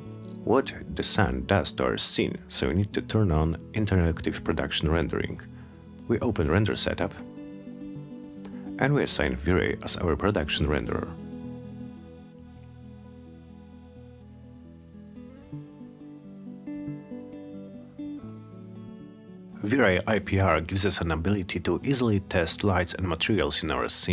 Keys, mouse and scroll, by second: 4.1 click, 7.9-10.0 drag, 11.1 click, 13.5 click, 16.5 click, 18.6 click.